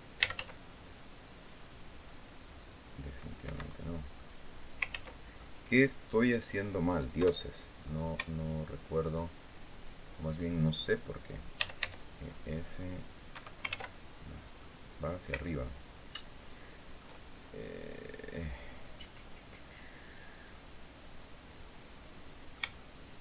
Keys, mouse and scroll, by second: 0.0-0.6 typing, 3.2 Escape, 3.5 click, 4.3 scroll down 2, 4.6 ctrl+z, 5.1 ctrl+click, 5.3-6.5 middle drag, 6.9 KP_7, 7.5-7.9 scroll up 2, 8.1 shift+middle click, 11.1-12.0 typing, 13.1 Escape, 13.4 ctrl+z, 14.1 scroll down 2, 14.3 click, 15.1-16.9 shift+drag, 19.8-20.2 scroll down 2, 20.3-22.4 drag.